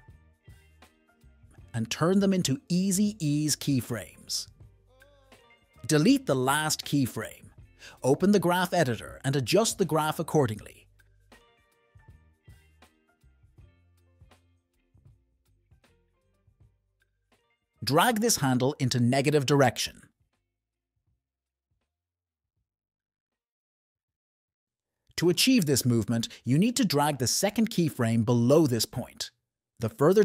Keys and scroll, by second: 6.7 BackSpace, 15.3 space, 17.3 space, 17.7 n, 21.6 space, 23.5 space, 25.8 F1.